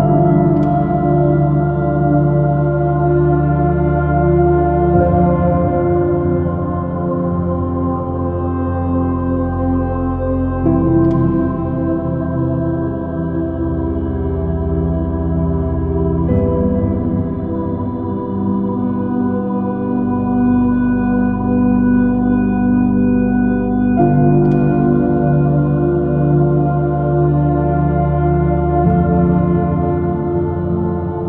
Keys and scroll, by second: 1.9 b, 8.0 space, 13.1-16.1 typing, 17.9 Up, 18.5 Up, 18.8 Up, 19.9 Down, 20.6 Down, 21.3 Up, 21.6 space, 26.2 super+v, 27.2 space.